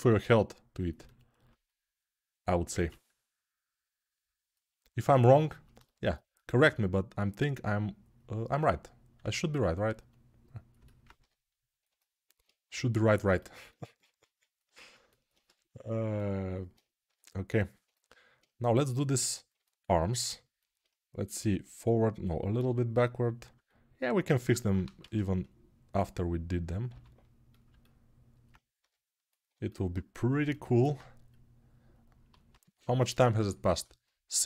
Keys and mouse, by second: 1.8-11.6 drag, 11.6-14.5 alt+middle drag, 14.5-15.8 alt+drag, 15.8-22.0 alt+middle drag, 22.0-23.3 drag, 22.3 g, 23.3-26.7 alt+middle drag, 26.7 click, 26.7 g, 27.4-32.2 alt+middle drag, 32.2 right click, 33.0-34.4 alt+middle drag.